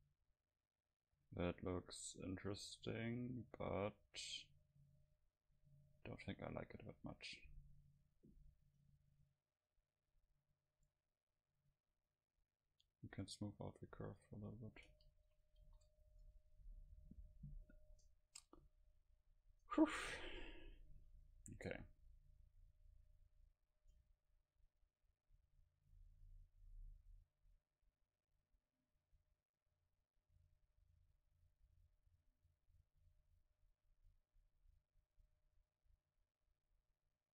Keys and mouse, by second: 0.0-2.0 middle drag, 10.3-13.9 drag, 14.9 a, 15.3 a, 15.6 ctrl+s, 16.7 F12, 24.0-34.0 middle drag.